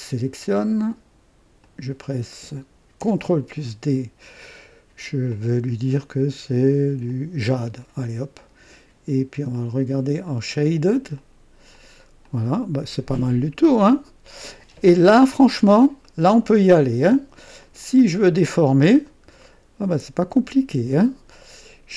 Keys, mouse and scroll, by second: 1.6 click, 3.0 ctrl+d, 5.3 click, 7.0 click, 9.5 click, 10.3 click, 11.2 click, 11.7 click, 12.2-15.4 drag, 15.5 scroll down 1, 16.0 right click, 17.6 click, 18.9-19.2 scroll up 1, 19.4 right click.